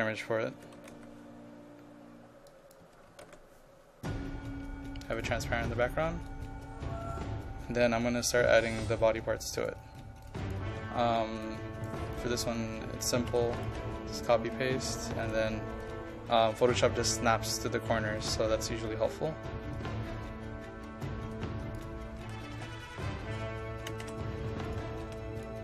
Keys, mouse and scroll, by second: 0.6 KP_5, 0.8 KP_1, 1.0 KP_2, 2.5 click, 2.9 KP_5, 3.1 KP_1, 3.3 KP_2, 5.2-12.2 drag, 12.4 ctrl+a, 13.2 ctrl+c, 13.6 click, 14.2 ctrl+v, 15.3-21.8 drag, 22.2 ctrl+a, 22.6 ctrl+c, 23.9 ctrl+c, 24.7 click, 25.0 ctrl+v, 25.5-25.6 drag.